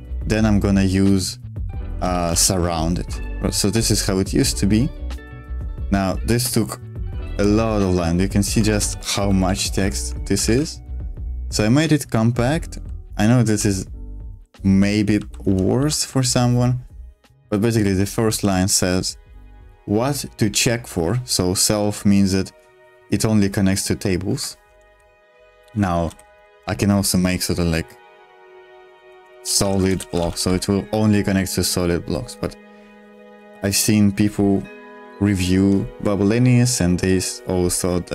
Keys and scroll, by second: 0.1-2.7 typing, 3.0 Escape, 7.3 shift+g, 8.7 ctrl+u, 8.8 ctrl+u, 9.1 ctrl+u, 9.4 ctrl+u, 9.7 ctrl+u, 10.4 super+1, 12.4-16.7 typing, 18.3 v, 24.3 Escape, 24.9-26.8 typing, 28.7-30.7 typing.